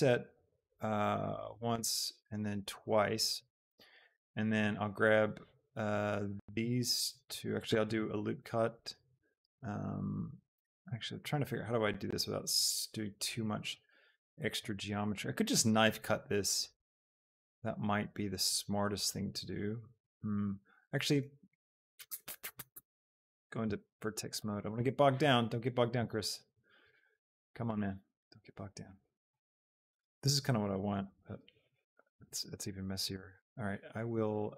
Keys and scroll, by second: 8.0 ctrl+r, 10.9 Escape, 32.2 ctrl+shift+z.